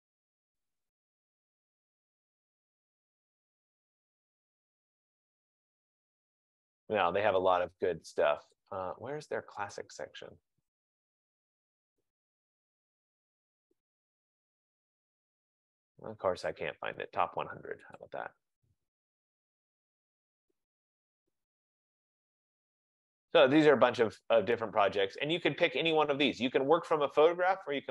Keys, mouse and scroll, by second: 8.8 click, 9.8 click, 18.1 click, 21.5-24.5 scroll, 24.7-25.4 scroll, 25.4-26.1 scroll, 26.1-26.5 scroll, 26.7-27.9 scroll.